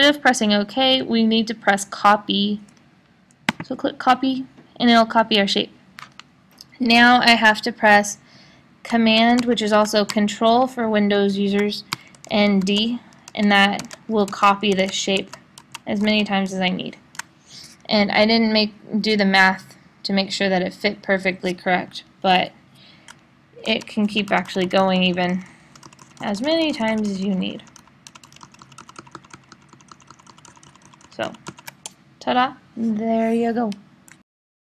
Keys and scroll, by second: 14.7 super+d, 16.0 super+d, 23.7 super+d, 26.5 super+d, 28.8 d, 30.2 d.